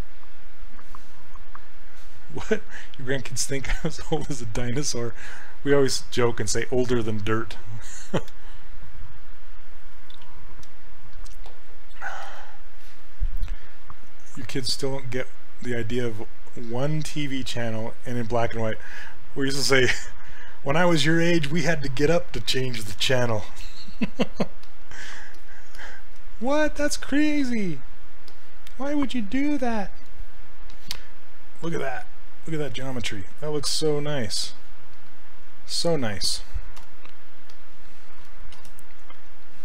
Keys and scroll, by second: 36.8 d, 38.6 shift+f.